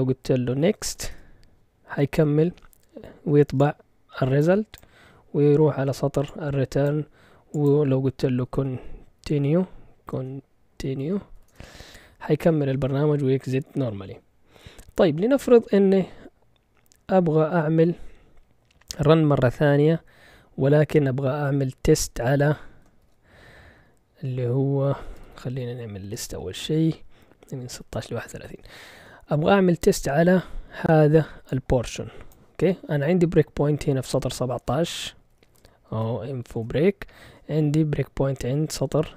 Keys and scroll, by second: 0.3-1.4 typing, 8.1-11.9 typing, 23.0 ctrl+l, 24.6-26.4 typing, 27.4-28.2 typing, 35.0-36.5 typing.